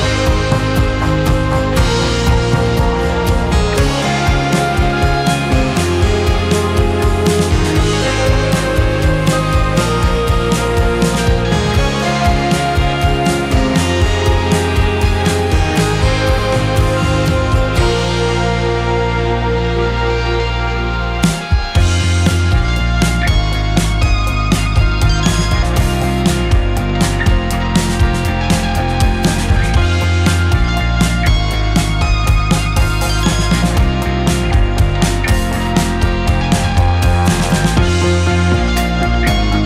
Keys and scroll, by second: 13.0 space, 16.5 2, 35.1 Delete.